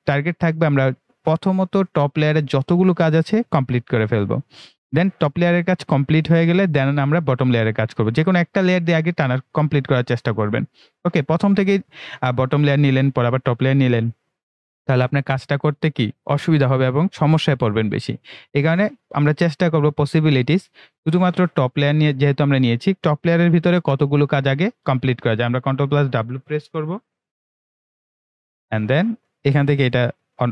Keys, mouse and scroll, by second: 25.3 ctrl+Num_Lock, 27.8 ctrl+w, 29.6 click.